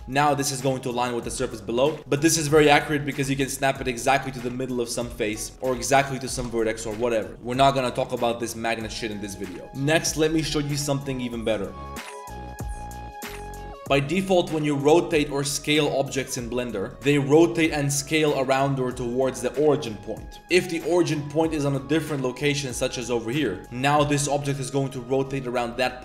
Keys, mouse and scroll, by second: 0.0 g, 2.0 Tab, 2.4 Tab, 2.6 click, 2.7 Tab, 2.8 3, 3.0 click, 3.2 shift+s, 4.3-7.3 typing, 5.5 Tab, 6.4 Tab, 8.0 click, 8.7-9.5 drag, 13.8 r, 14.1 r, 15.2 s, 16.9 r, 17.5 s, 20.4 ctrl+shift+Tab, 20.7 click, 21.2-21.6 drag, 21.9 ctrl+shift+click, 22.2 ctrl+shift+drag, 22.7 ctrl+shift+click, 23.3 click, 23.6 r.